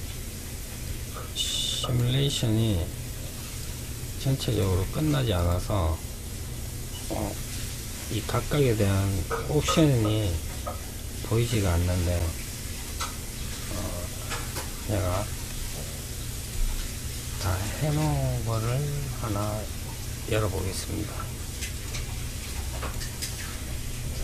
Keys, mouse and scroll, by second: 0.0-6.6 drag, 12.9-13.8 middle drag, 13.8-14.1 scroll down 2, 14.3-15.6 middle drag, 15.6-18.6 drag.